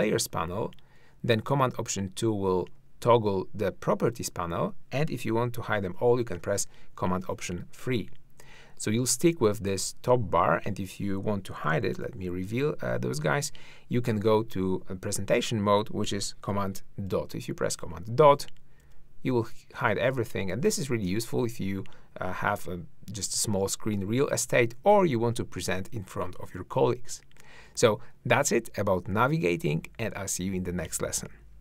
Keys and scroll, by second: 1.6 alt+super+2, 2.8 alt+super+2, 6.3 alt+super+3, 11.7 alt+super+1, 12.0 alt+super+2, 17.1 super+., 24.8 super+..